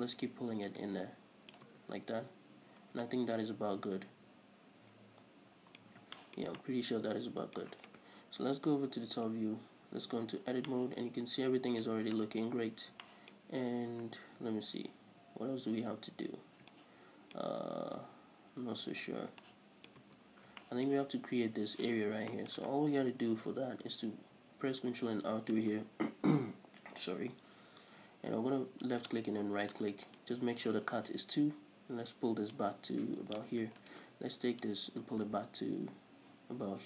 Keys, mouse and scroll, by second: 0.1 Tab, 0.9-3.3 drag, 1.9 Tab, 3.1 scroll down 1, 3.3-7.9 middle drag, 6.2 scroll up 1, 8.7 KP_7, 9.2 Tab, 9.6 scroll up 1, 10.1 a, 10.8 Tab, 10.9 shift+middle click, 12.9 scroll up 1, 13.3 shift+middle click, 14.0 Tab, 16.7 scroll down 1, 17.0 shift+middle click, 18.3 Tab, 19.7 shift+middle click, 20.3 Tab, 20.5-29.3 middle drag, 20.5 scroll up 1, 22.2 scroll up 1, 23.2 ctrl+r, 29.3 click, 29.5 right click, 30.3 alt+right click, 32.8-34.1 drag, 34.1 alt+right click, 34.9-36.8 drag.